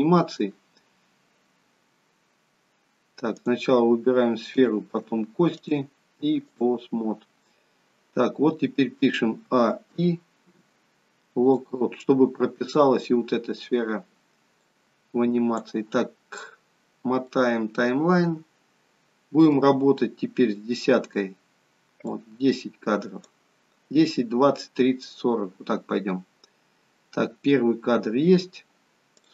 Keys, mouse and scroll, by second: 3.2 click, 4.5 shift+click, 5.6 click, 9.5 a, 9.9 i, 14.5 click, 16.1-17.2 scroll up 10, 17.2 middle click, 21.2-22.1 scroll down 1, 22.1 click, 27.0-29.1 scroll down 1, 29.1 click.